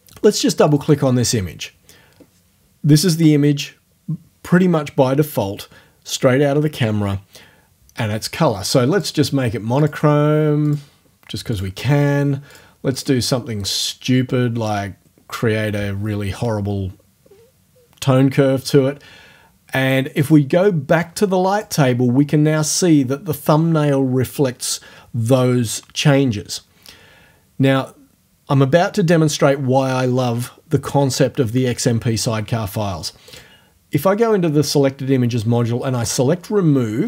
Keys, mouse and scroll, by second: 0.7 click, 1.1-4.4 scroll up 1, 9.0 click, 9.8 click, 10.6 click, 11.6 click, 12.5 click, 13.0 click, 13.6 click, 14.7 click, 20.2 click, 21.6 click, 33.3 click, 36.1 click.